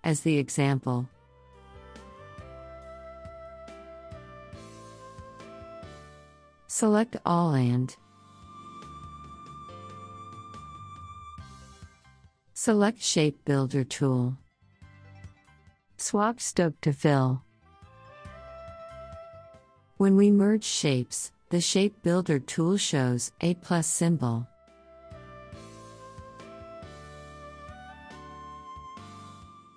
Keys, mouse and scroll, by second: 0.2 click, 1.2 ctrl+click, 2.9 click, 6.0 click, 6.9 ctrl+click, 8.0-12.4 drag, 13.4 right click, 15.2 click, 18.6 click, 20.8-29.7 drag.